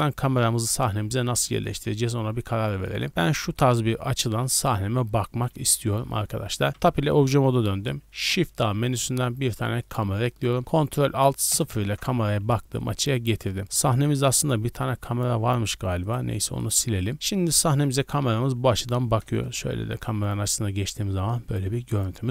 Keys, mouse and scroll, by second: 0.6 middle drag, 0.9 scroll up 3, 1.4-2.0 shift+middle drag, 2.0-2.6 scroll up 2, 2.8-5.6 shift+middle drag, 5.9 scroll down 1, 6.7 Tab, 6.7-7.2 scroll down 1, 8.1 shift+a, 11.5 ctrl+alt+KP_0, 12.8-13.1 middle drag, 13.1-13.6 scroll down 4, 13.6 z, 14.5 middle click, 15.4-16.0 middle drag, 16.0 right click, 16.4 x, 17.0 drag, 17.0 middle click, 17.1 right click, 19.2 KP_0, 20.0 z, 20.6 scroll up 1, 21.4-22.3 scroll down 5.